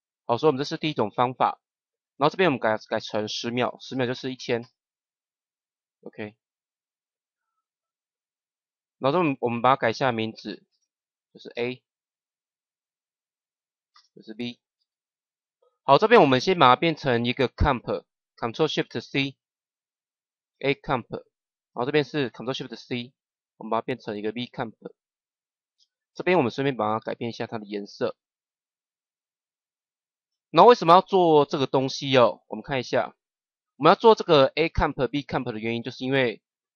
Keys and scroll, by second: 3.8 KP_1, 10.6 Return, 11.4 shift+a, 13.8 Return, 14.7 shift+b, 18.9 ctrl+shift+c.